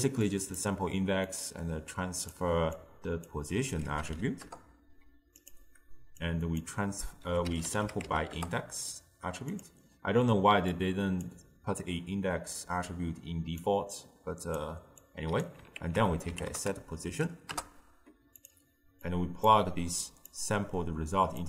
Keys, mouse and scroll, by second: 1.3 click, 2.8 drag, 6.3 drag, 10.8 drag, 13.7 click, 15.0 click, 15.8 ctrl+a, 19.1 click, 20.3 click.